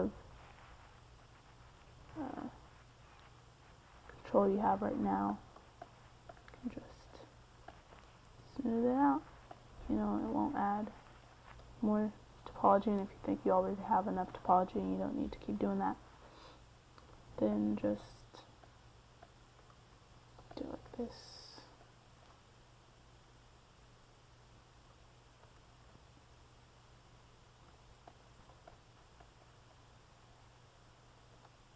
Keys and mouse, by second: 1.0-3.2 drag, 2.3 c, 3.2 middle click, 4.4 f, 6.2-8.2 drag, 9.5 middle click, 13.3 middle click, 15.1 f, 16.8 middle click, 17.8 f, 25.8 middle click, 26.8-29.4 middle drag, 29.5 f, 30.8-31.7 drag.